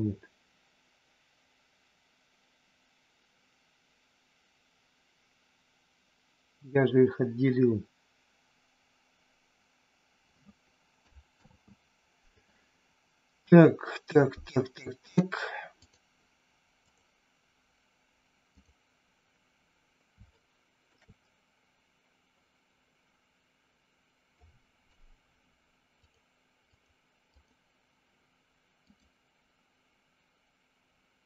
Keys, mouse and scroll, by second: 11.3 ctrl+z, 14.9-16.0 drag, 18.5 click, 20.3 shift+middle click, 24.3 click, 26.0 click, 26.7 click, 28.9-31.2 drag.